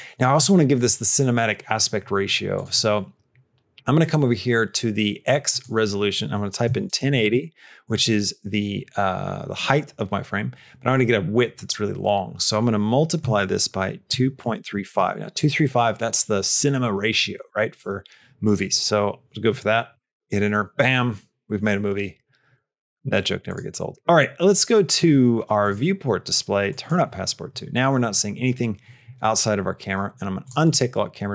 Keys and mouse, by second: 2.4 click, 5.3-22.7 drag, 23.3 click, 25.5 click, 26.5 click, 30.2 click.